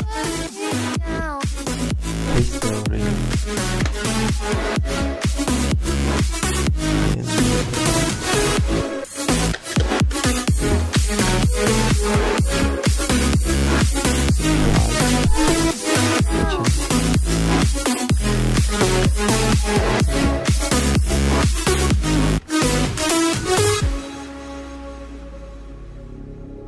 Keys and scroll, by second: 2.6-3.9 typing, 9.1-10.9 typing, 11.1 Return, 16.7-18.6 typing, 18.8 Return, 21.6-23.1 typing, 25.7 Return.